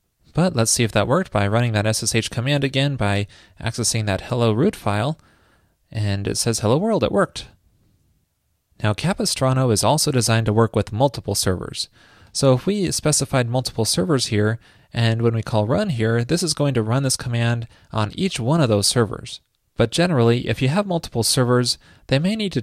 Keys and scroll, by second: 12.9 ctrl+shift+d.